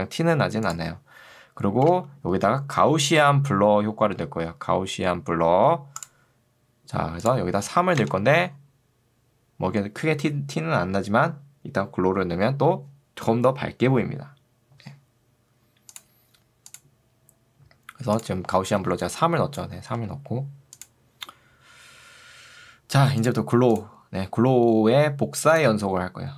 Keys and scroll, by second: 1.9 ctrl+space, 2.5 g, 2.9 a, 8.1 Return, 18.9 ctrl+2, 19.9 Escape.